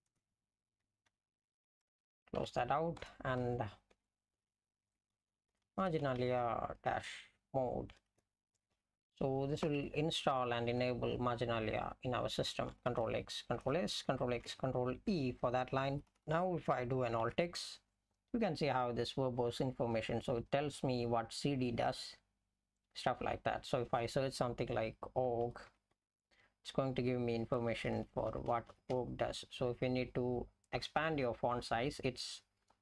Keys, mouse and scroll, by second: 0.0-1.1 typing, 2.4 ), 3.0 Return, 3.7-10.2 typing, 10.8 Up, 13.6 ctrl+s, 14.8 ctrl+e, 15.5 Down, 15.9 Right, 16.1 Right, 16.2 ctrl+e, 17.2 alt+x, 25.2-26.4 typing, 27.8 Down, 28.0 Down, 28.1 Down, 28.3 Down, 28.5 Down, 28.7 Down, 29.0 Down.